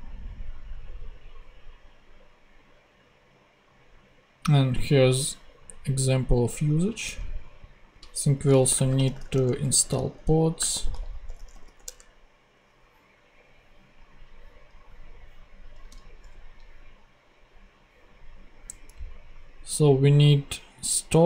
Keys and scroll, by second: 7.0 super+Tab, 8.4-12.0 typing, 15.8 super+Tab.